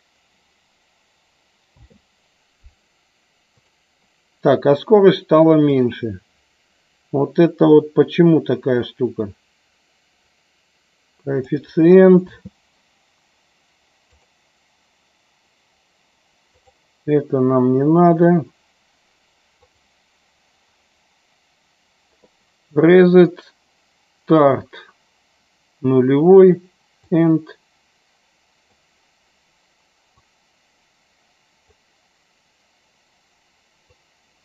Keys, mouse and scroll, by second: 1.9 space, 3.5-5.6 drag, 10.3-11.4 drag, 12.1 space, 27.1-28.7 drag, 30.2-31.7 drag, 33.9 click.